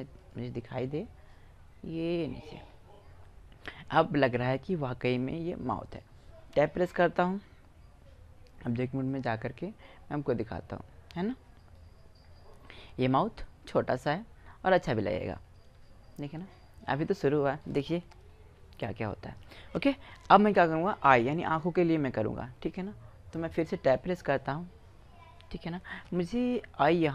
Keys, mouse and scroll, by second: 1.1 click, 1.8-3.9 drag, 4.7 middle click, 7.0 Tab, 8.1-10.3 middle drag, 10.7-13.3 middle drag, 14.1 middle click, 14.6-15.9 middle drag, 17.3 middle click, 18.1 KP_1, 22.0-23.1 middle drag, 23.5 Tab.